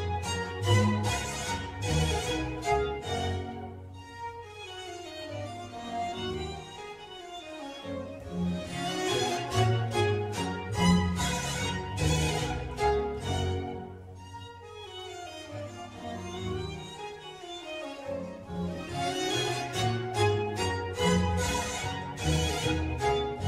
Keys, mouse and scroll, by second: 0.2 click, 2.4 click, 3.8 Tab, 5.4 click, 6.0-8.0 middle drag, 8.0 click, 9.5 click, 10.2 click, 10.8 Tab, 11.6 click, 12.2 Tab, 12.7-14.3 middle drag, 14.3 shift+a, 18.9 scroll down 1, 19.1-20.8 middle drag, 20.8 g, 22.1-22.7 middle drag, 22.7 click.